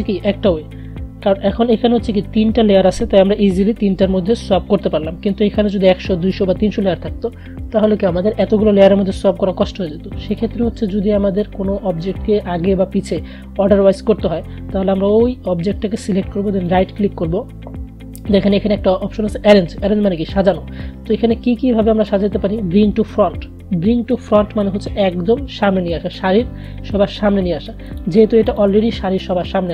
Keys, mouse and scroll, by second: 10.3 click, 16.7 right click, 28.0 click.